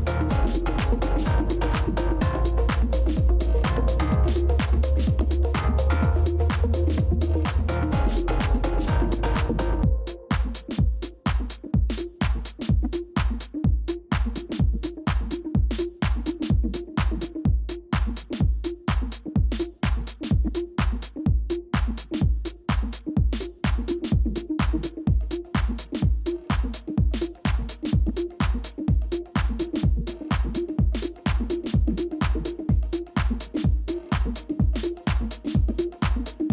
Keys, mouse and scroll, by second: 0.4 ctrl+-, 2.0 ctrl+-, 5.3 Return, 6.5 typing, 10.5 right click.